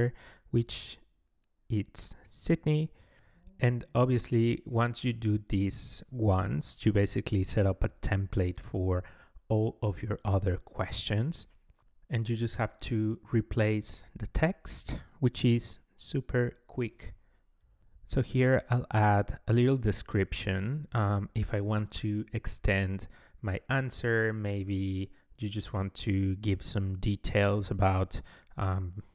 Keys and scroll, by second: 19.2-21.4 typing, 21.7 Return, 24.5 BackSpace, 25.4 Left, 25.9 ctrl+a.